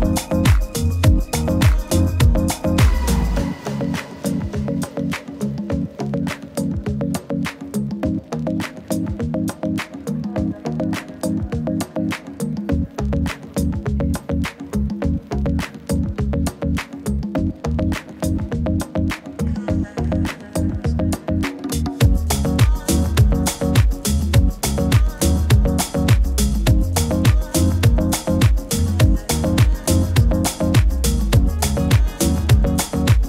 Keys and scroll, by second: 3.1 super+z.